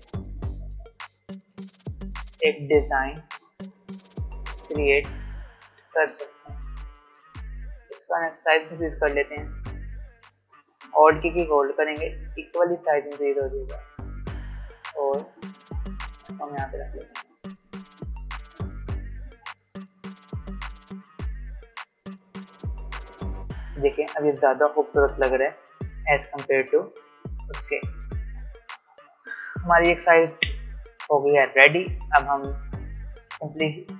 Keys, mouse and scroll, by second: 1.2 alt+scroll up 1, 3.5 a, 4.8-7.1 drag, 7.1 ctrl+z, 7.8 v, 8.5 alt+scroll up 1, 9.3 space, 9.5 click, 9.8 space, 11.7-15.9 alt+drag, 16.4-17.0 alt+scroll down 1, 19.4 space, 19.6 click, 19.9 space, 23.4-24.5 alt+scroll up 1, 27.8 alt+scroll down 1, 28.0 click, 29.2-31.0 scroll up 1.